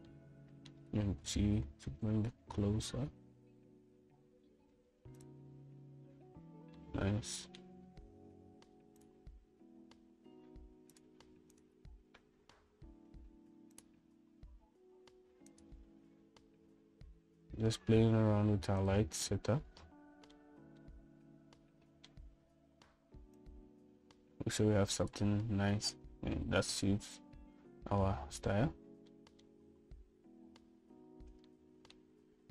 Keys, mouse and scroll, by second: 1.3 middle click, 2.4 g, 8.0 middle click, 10.2 click, 10.9 z, 12.8 click, 16.9-18.1 drag, 18.5 s, 20.5-21.6 middle drag, 22.0-23.3 middle drag, 24.6-26.5 drag, 30.3-30.7 middle drag.